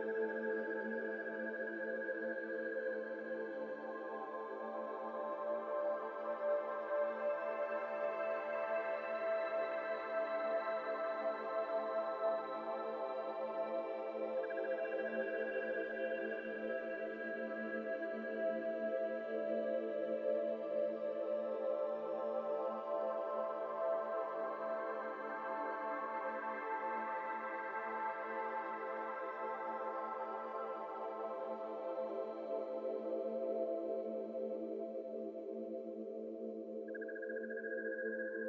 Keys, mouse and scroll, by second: 0.0 1, 1.0 shift+click, 2.3 shift+click, 3.2 shift+click, 4.1 shift+click, 4.8 shift+click, 5.6 shift+click, 6.3 shift+click, 7.2 alt+z, 9.4 middle click, 9.7 alt+z, 9.9 middle click, 10.1-10.6 scroll up 1, 10.6 s, 12.8 middle click, 13.0 scroll up 2, 14.0 ctrl+b, 16.3 alt+e, 17.4 e, 19.4 Tab, 19.7 scroll down 1, 19.7 middle click, 20.0 alt+z, 20.4 1, 20.9 Tab, 21.1 1, 21.5-24.1 drag, 24.1 t, 24.3 scroll down 1, 24.4 middle click, 24.8 click, 25.9 click, 26.9 2, 27.7 shift+click, 28.3 middle click, 28.6 x, 29.6 alt+z, 29.8 middle click, 30.0 Tab, 30.6 ctrl+1, 30.9 ctrl+2, 31.2-31.6 middle drag, 31.6 click, 31.8-32.1 middle drag, 32.1-32.5 scroll down 1, 32.6-33.0 middle drag, 33.0 click, 33.4-35.0 right drag, 35.0 middle drag, 35.2-35.7 scroll up 2, 35.7 Tab, 35.9 middle click, 36.0 scroll up 2, 36.2 2, 36.5 alt+click, 38.0-38.4 middle drag.